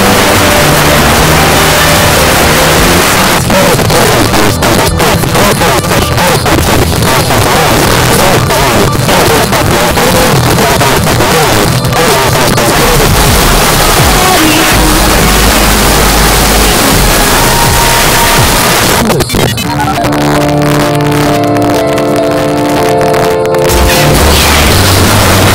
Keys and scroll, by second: 3.0 Page_Down, 18.6 Page_Down.